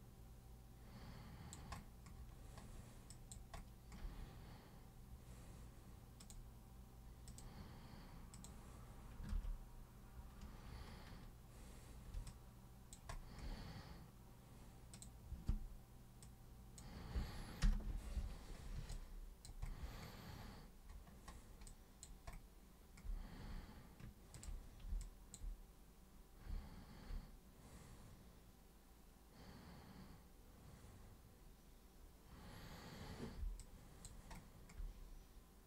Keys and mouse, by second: 3.1 alt+super+click, 6.2 super+click, 7.3 super+click, 8.3 super+click, 9.3 ctrl+super+z, 12.3 alt+super+click, 14.9 super+click, 16.2 super+click, 17.6 super+Return, 18.9 alt+super+click, 21.7 alt+super+click, 24.4 ctrl+super+click, 25.1 alt+super+click, 33.6 alt+super+click.